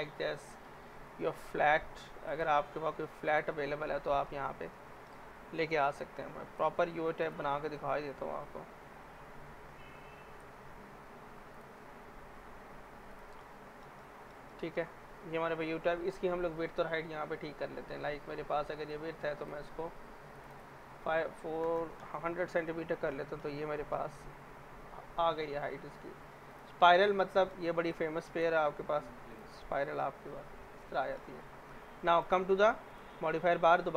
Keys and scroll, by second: 4.2 Escape, 5.5 Delete, 21.3-22.3 typing, 27.6-28.4 typing, 33.0 z.